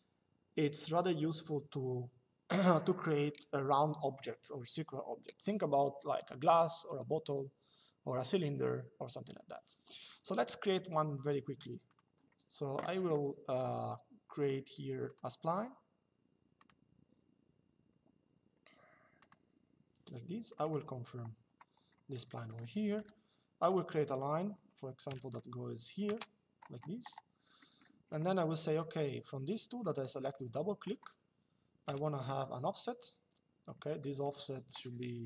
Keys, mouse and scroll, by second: 11.6 click, 14.1 click, 16.3 click, 18.9 click, 20.2 click, 21.1 Escape, 22.0 middle click, 22.6 click, 24.8 KP_5, 27.3 middle click, 29.6 click, 33.7 middle click.